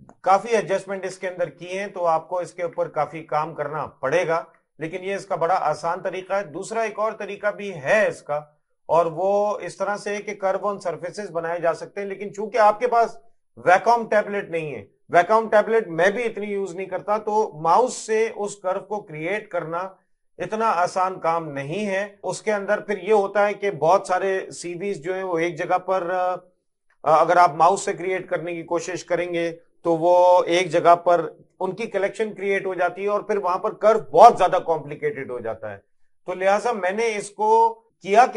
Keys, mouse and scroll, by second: 0.8 middle click, 1.4 middle click, 2.3 middle click, 3.1 middle click, 4.1 middle click, 5.4 middle click, 9.9 middle click, 19.3 middle click, 20.6 shift+middle click, 21.6 middle click, 36.6 middle click, 38.1 shift+middle click.